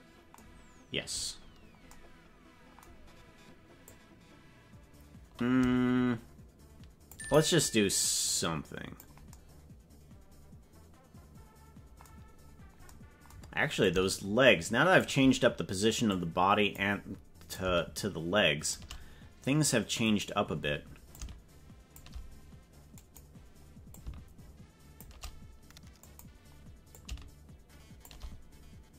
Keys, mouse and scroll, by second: 3.8 click, 6.4 click, 8.3 click, 13.8-15.0 shift+drag, 16.2 click, 17.6-18.8 shift+drag, 20.2 click, 21.2 shift+click, 23.0 click, 23.9-25.1 shift+drag, 26.1 click, 26.9-28.1 shift+drag.